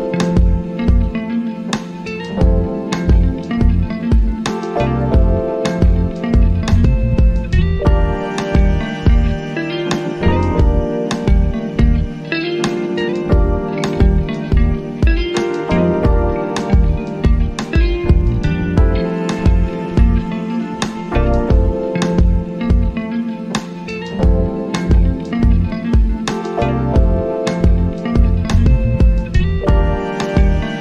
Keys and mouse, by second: 27.0 click, 29.4-30.8 drag.